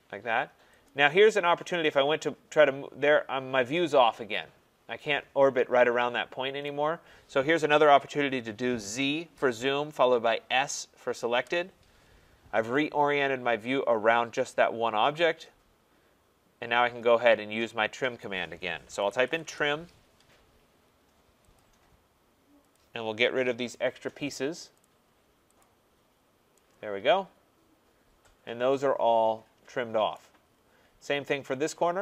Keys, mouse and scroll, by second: 0.9 click, 6.6 right click, 8.8 z, 9.3 z, 10.5 s, 11.3 s, 12.2-12.7 scroll, 13.5 typing, 18.2 right click, 19.0 typing, 19.4 Return, 21.5 click, 22.7 click, 23.7 click, 24.8 click, 25.6 click, 26.1 scroll, 30.1 right click, 30.4 middle click, 30.4 middle click, 30.4 middle click, 30.8 middle click, 30.9 middle click, 31.0 middle click, 31.1 middle click.